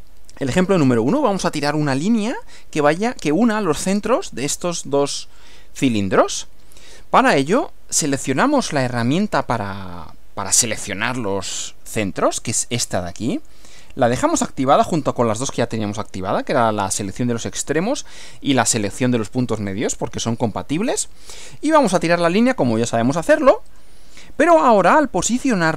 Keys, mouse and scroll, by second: 13.4 click, 23.7 click.